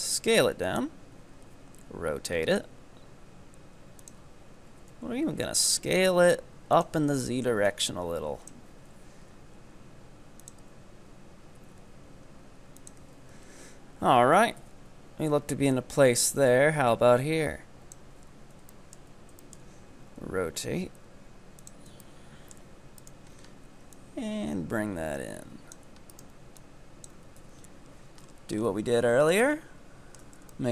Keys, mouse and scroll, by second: 1.2 r, 4.7 s, 7.8-9.3 drag, 9.3 r, 10.6 s, 14.6 KP_7, 15.8-18.1 drag, 18.1 z, 18.8-20.2 shift+middle drag, 20.2 r, 22.1-23.1 shift+middle drag, 23.1 right click, 23.4-23.9 scroll up 3, 23.9-26.1 drag, 26.1 right click, 26.6 click, 27.4 KP_1, 27.9 z, 28.3-29.1 scroll up 8, 29.1 z, 29.5-30.7 shift+middle drag.